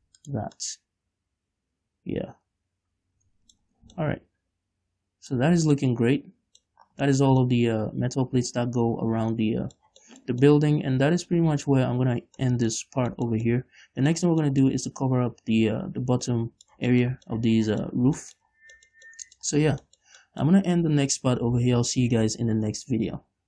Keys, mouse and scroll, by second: 0.8 shift+click, 1.1-5.9 middle drag, 1.7 click, 1.7 right click, 3.9 click, 4.1 Tab, 4.3 scroll down 2, 4.7 click, 4.9 right click, 5.9 a, 6.0 click, 6.0 middle click, 6.0 right click, 6.2 scroll down 2, 6.4 middle click, 7.4 scroll down 2, 7.5-11.6 shift+middle drag, 13.3-13.6 scroll up 1, 13.6 shift+middle click, 14.2-18.6 middle drag, 18.6-19.3 shift+scroll down 3, 18.7 shift+middle click, 19.3 shift+middle click, 20.1-21.3 shift+middle drag, 20.1 scroll up 1, 21.3 ctrl+s.